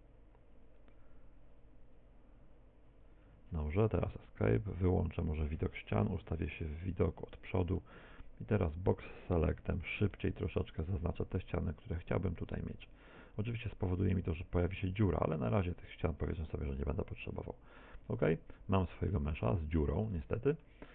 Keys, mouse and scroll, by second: 4.6 z, 6.3 KP_1, 8.0 shift+middle click, 10.6 b, 15.8 x, 17.6 Tab, 18.0 z, 18.4 middle click, 20.2 shift+middle click.